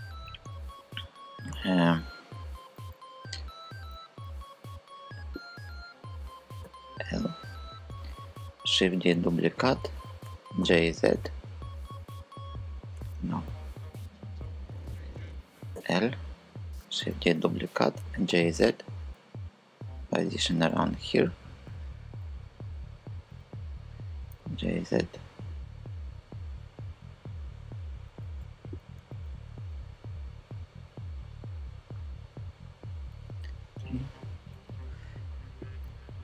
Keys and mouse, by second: 2.5 super+z, 6.2 l, 8.5 shift+d, 8.9 Return, 9.9 g, 10.2 z, 11.6 super+z, 12.6 Escape, 15.4 l, 16.6 shift+d, 17.0 Return, 17.6 g, 18.0 z, 19.8 click, 20.4 KP_5, 21.7 KP_3, 23.9 g, 24.3 z, 33.1 KP_3.